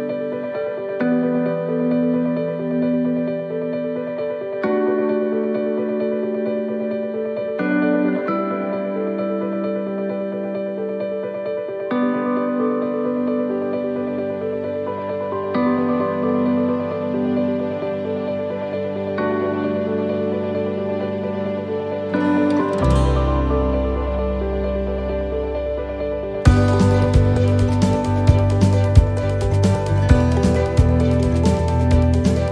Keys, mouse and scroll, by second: 10.0 middle click, 10.6-10.9 scroll down 1, 11.0 middle click, 11.6-12.3 scroll up 3, 12.5 middle click, 13.0 scroll down 1, 15.0 click, 16.5 middle click, 17.7 right click, 18.9 click, 20.8 right click, 21.6 click, 22.7 middle click, 23.1-23.8 scroll down 1, 25.1 right click, 26.2-27.6 l, 28.0 l.